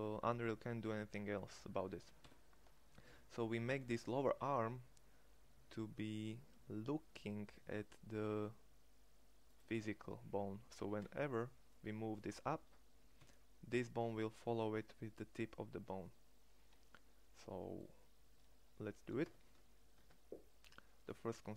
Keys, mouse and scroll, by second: 9.7 middle click, 10.4 g, 18.9 Tab, 19.6 Tab.